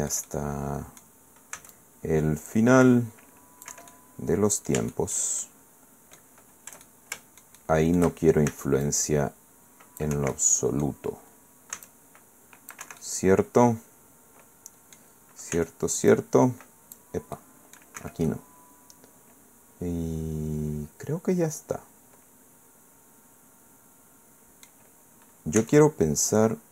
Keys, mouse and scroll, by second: 1.5 c, 1.7-3.8 drag, 3.7 Escape, 3.9-5.3 drag, 4.8 Caps_Lock, 5.6 click, 6.8-8.2 shift+drag, 8.5 shift+c, 8.8-10.2 drag, 10.1 Escape, 10.3 click, 11.7 c, 11.9-12.9 drag, 12.8 Escape, 13.0-15.2 drag, 15.5 c, 16.1-18.0 drag, 18.0 Escape, 18.0 middle click, 18.3 click, 25.6 c, 25.8-26.7 drag.